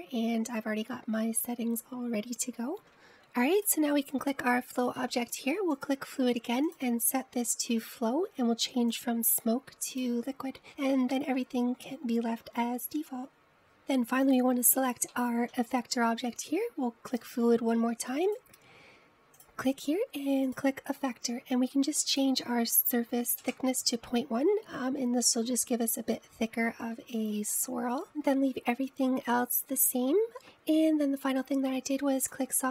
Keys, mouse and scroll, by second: 3.0 click, 4.6 click, 6.9-12.7 drag, 15.4 click, 16.2-18.2 middle drag, 18.2-19.4 drag, 20.5-26.2 drag, 30.3-32.1 drag.